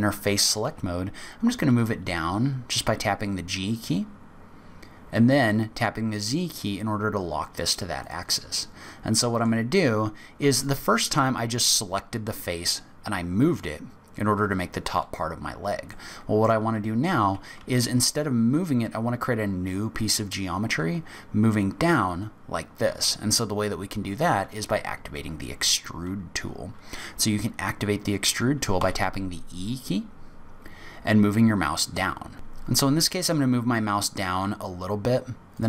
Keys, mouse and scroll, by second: 0.6 g, 8.5 middle click, 9.9-10.3 scroll up 3, 15.2-15.6 scroll down 5, 15.9 middle click, 28.7 e, 32.3 e.